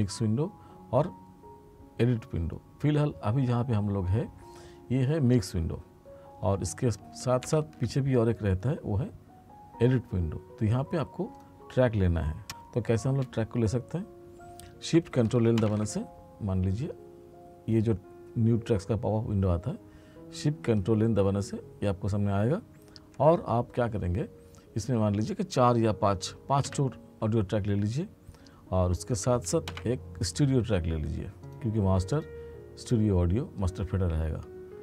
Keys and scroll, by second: 7.4 ctrl+=, 15.6 ctrl+shift+n, 29.7 ctrl+shift+n.